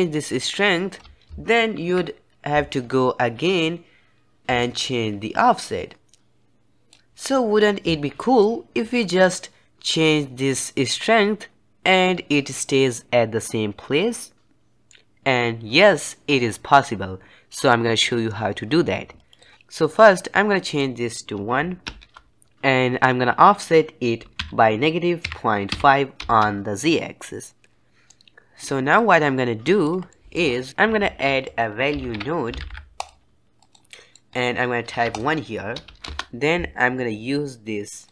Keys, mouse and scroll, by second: 1.7 KP_1, 4.5-6.2 shift+drag, 8.3-10.8 middle drag, 10.8-13.9 drag, 19.5-20.6 scroll up 2, 20.6-22.2 drag, 22.2 middle click, 27.9 middle click, 28.0 click, 28.9 click, 30.0 middle click, 30.4 scroll down 2, 30.6 middle click, 30.9 shift+a, 33.8-34.2 middle drag, 34.2-35.0 scroll up 2, 35.0-38.1 drag.